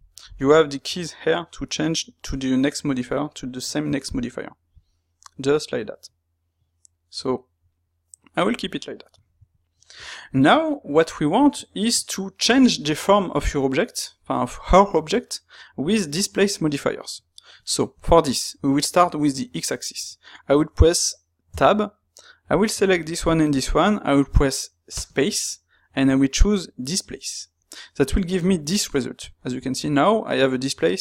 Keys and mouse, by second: 9.5 shift+middle click, 13.5-16.8 middle drag, 17.5-22.5 shift+middle drag, 22.5 click, 23.2 shift+click.